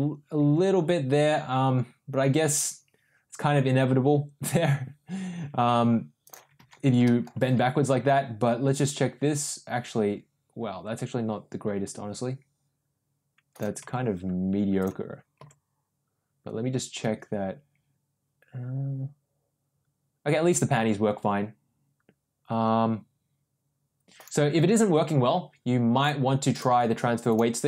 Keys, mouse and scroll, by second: 6.9 ctrl+z, 7.0 middle click, 7.3 r, 14.1 ctrl+z, 15.4 g, 24.8 ctrl+z, 26.0 click, 27.2 click.